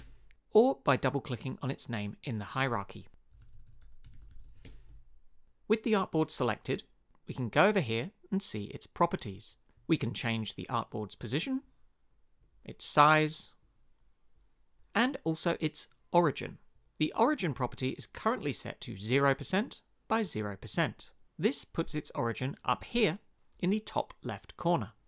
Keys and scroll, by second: 0.0-0.2 typing, 3.1-5.0 typing.